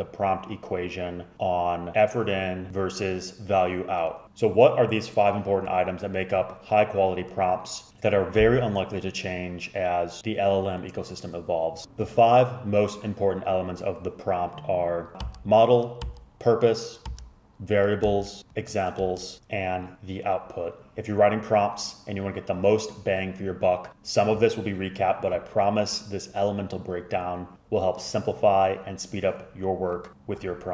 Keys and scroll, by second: 11.8 typing, 14.9-15.6 typing.